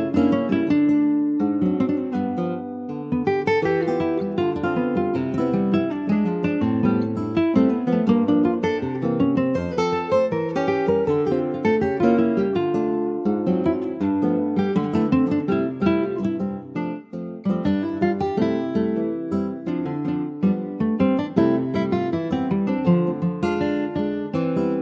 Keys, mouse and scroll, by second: 0.3 scroll up 2, 0.6-1.7 shift+middle drag, 1.7-3.3 drag, 3.3 middle click, 3.8 click, 4.1-6.1 middle drag, 6.1 ctrl+s, 6.1 click, 6.4-7.5 middle drag, 7.5 click, 9.4 click, 9.7 scroll down 4, 9.9 middle click, 10.2 scroll up 2, 10.6 ctrl+s, 10.7 click, 11.0 middle click, 11.2 scroll up 1, 11.4 Tab, 11.8 middle click, 12.0 scroll up 1, 13.3 ctrl+e, 14.4 Tab, 15.5 Tab, 16.8 ctrl+r, 19.3 3, 19.6 click, 20.1-21.4 shift+middle drag, 21.4 e, 23.6 2, 23.9 click.